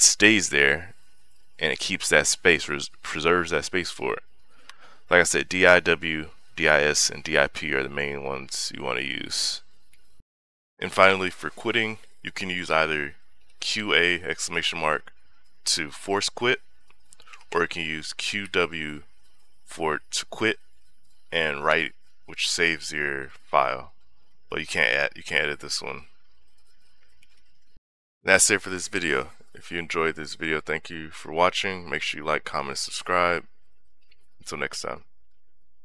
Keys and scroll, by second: 5.0 Escape, 8.3 j, 9.1 k, 9.7 d, 10.1 i, 12.6-14.8 typing, 17.1 BackSpace, 18.2 w, 21.5 Return, 27.6 :.